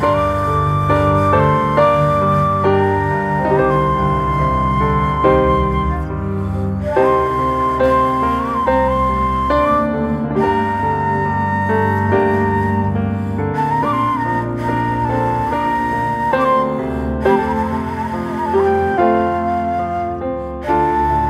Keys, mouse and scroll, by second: 0.6 scroll up 2, 0.9 shift+middle click, 1.5 e, 10.3 ctrl+r, 12.1 ctrl+r, 13.1-14.8 middle drag, 14.8 click, 15.4 click, 15.7 middle click, 16.4 shift+click, 17.1-18.4 drag, 18.4 alt+middle click, 18.6 alt+middle click, 19.5 ctrl+r, 20.4 g.